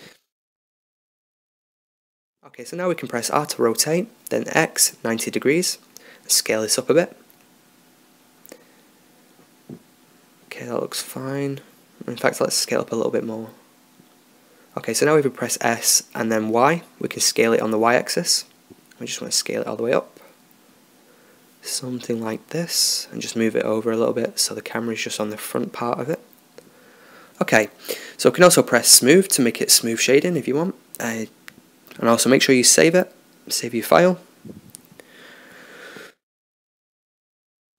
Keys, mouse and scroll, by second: 1.4-3.4 middle drag, 3.5 r, 6.8 s, 10.8-11.8 middle drag, 13.8 s, 15.0 s, 23.5-24.6 drag, 26.6 t, 27.9 click, 29.6 t, 29.7 click, 31.3 ctrl+s, 36.5 middle click.